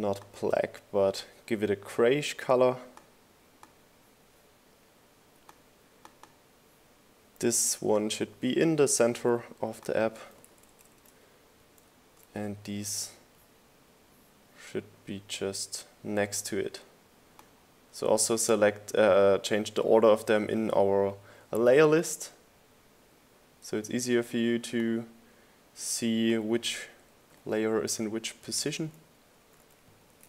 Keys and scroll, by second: 10.2 shift+Right, 26.9 shift+Right, 27.5 Right, 28.4 Left, 29.0 Right.